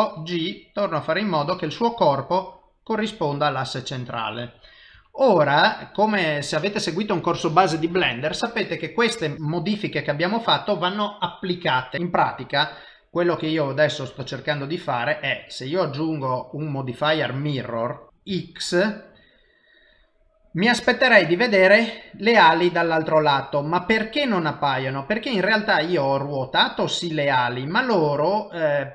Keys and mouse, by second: 2.1 middle click, 4.9 KP_1, 7.9 typing, 14.0 click, 15.3 click, 18.1 middle click, 18.2 typing, 18.3 shift+middle click, 19.3 middle click, 20.5 middle click, 23.5 typing, 24.1 middle click.